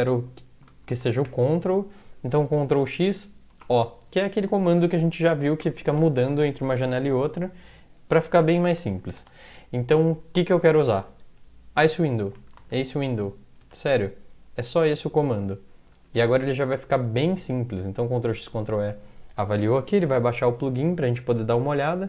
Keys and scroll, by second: 0.0-1.2 typing, 2.7-3.6 typing, 5.9 typing, 8.8-9.4 typing, 12.2-13.2 typing, 13.6 Tab, 15.9 End, 18.0 ctrl+x, 18.4 ctrl+e.